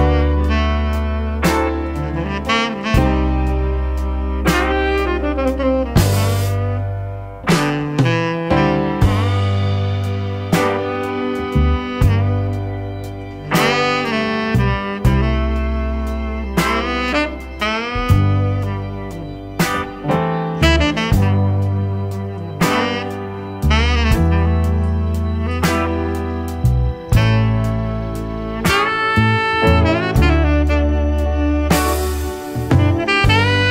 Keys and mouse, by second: 0.7 shift+click, 1.9 click, 4.1 click, 4.3 click, 5.4 click, 5.8-8.4 drag, 9.2-10.6 drag, 12.8 click, 13.2-16.3 drag, 16.5 middle click, 17.2 click, 18.9 shift+click, 21.3 click, 21.5-22.1 drag, 22.5-23.7 drag, 25.6 click, 28.2 click, 28.9 shift+middle click, 29.7 shift+click, 31.2-32.0 drag, 32.9 click, 33.2-33.7 drag.